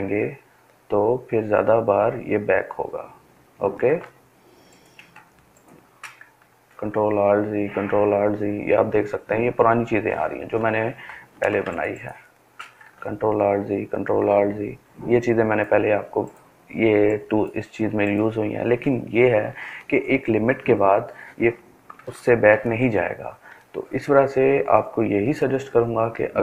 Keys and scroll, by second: 0.7 ctrl+alt+z, 1.3 ctrl+alt+z, 1.7 ctrl+alt+z, 2.3 ctrl+alt+z, 5.3 ctrl+alt+z, 5.9 ctrl+alt+z, 6.5 ctrl+alt+z, 6.9 ctrl+alt+z, 8.0 ctrl+alt+z, 9.0 ctrl+alt+z, 11.6 ctrl+alt+z, 12.3 ctrl+alt+z, 21.1 ctrl+alt+z, 22.3 ctrl+alt+z, 25.3 ctrl+space, 25.8 ctrl+space.